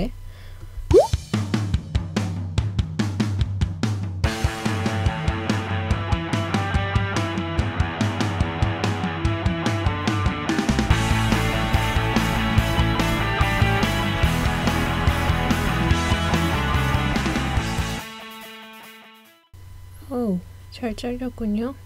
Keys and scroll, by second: 7.2 d, 11.0 Page_Up.